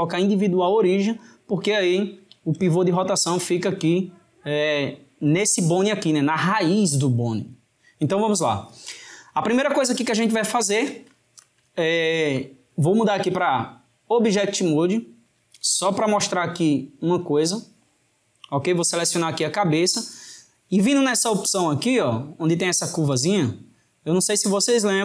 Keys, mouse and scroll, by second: 2.3 r, 9.5-14.3 ctrl+middle drag, 14.3-19.0 drag, 23.2-24.5 drag, 24.5-25.0 middle drag.